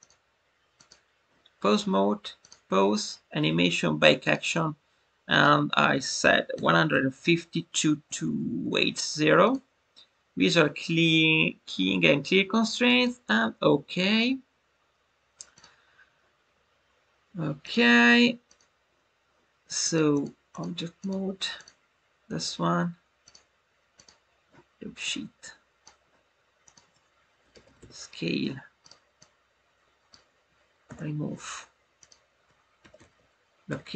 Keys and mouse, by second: 2.3-13.6 drag, 17.6-18.6 drag, 19.7 click, 20.2 click, 21.0 click, 23.3 click, 25.0 click, 26.6-28.8 drag, 29.1 click, 32.1-33.9 drag.